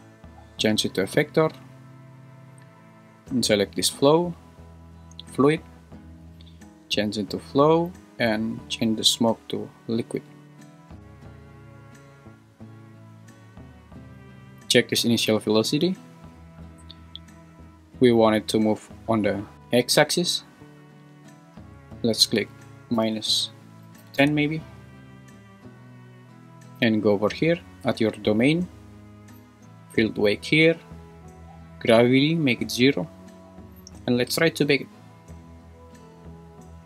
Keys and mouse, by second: 0.1-1.4 drag, 6.4-7.6 drag, 8.6-10.4 drag, 19.5 `, 21.9-24.2 drag, 30.2 drag, 32.2 click.